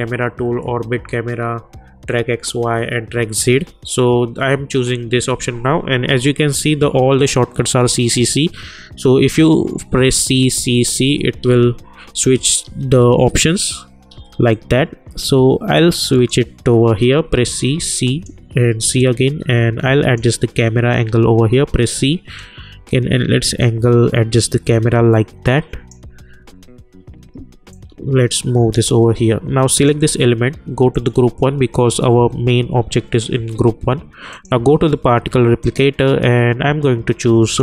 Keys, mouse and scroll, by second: 10.1-14.1 typing, 14.5-17.1 drag, 17.1 c, 17.6 c, 18.0 click, 18.6 c, 19.0-21.5 drag, 21.5 c, 21.9 c, 22.4-26.4 drag, 26.4 c, 27.3 c, 27.7-29.8 drag, 34.3 click.